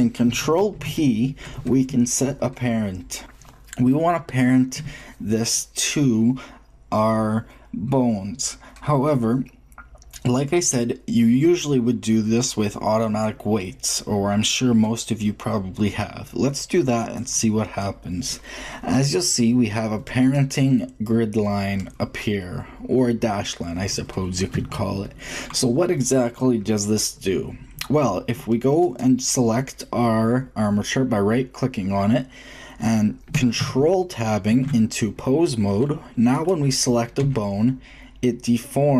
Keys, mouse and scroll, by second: 0.8 ctrl+p, 19.0-21.2 middle drag, 24.3-26.7 shift+middle drag, 28.8-30.7 drag, 34.4 ctrl+super+Tab, 36.3 right click, 37.1 g, 38.0 drag.